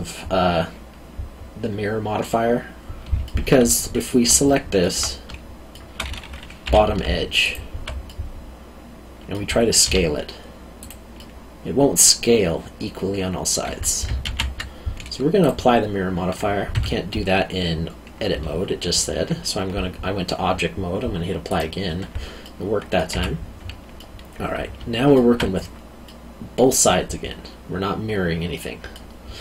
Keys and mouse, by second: 3.2 alt+middle click, 4.4 alt+middle click, 5.0 middle click, 6.6 2, 7.4 alt+click, 8.1 middle click, 9.8 s, 10.8 click, 11.2 middle click, 14.2 ctrl+z, 15.4 click, 16.7 Tab, 21.5 click, 22.4 middle click, 23.1 Tab, 24.0 middle click.